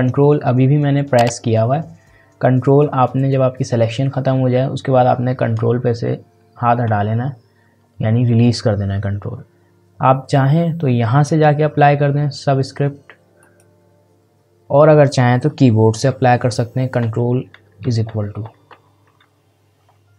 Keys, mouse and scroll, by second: 13.4 click, 17.0 ctrl+=.